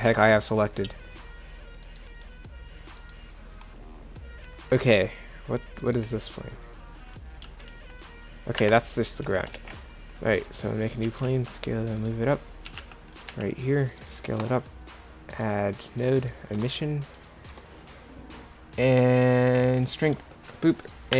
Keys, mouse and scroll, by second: 0.1 Delete, 7.5 g, 9.3 a, 11.0 g, 12.4 click, 12.8 g, 13.3 s.